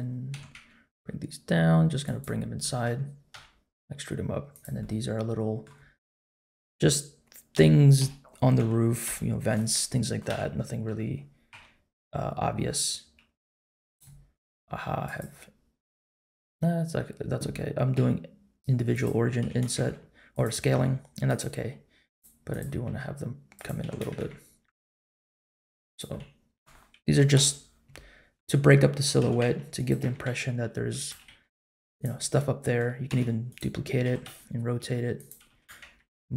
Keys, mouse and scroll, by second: 0.3 g, 2.3 scroll up 2, 2.6 middle click, 3.3 e, 4.8 middle click, 6.6-9.0 typing, 10.3 KP_7, 11.5 s, 15.0-16.6 drag, 17.9 s, 19.4 g, 20.7 s, 22.1 click, 22.8 s, 23.8 g, 26.1 middle click, 27.3 KP_Decimal, 28.0-29.0 scroll down 2, 28.3 middle click, 29.2 g, 30.0 s, 31.1 g, 32.1 middle click, 33.1 shift+d, 34.0 r, 35.5 g.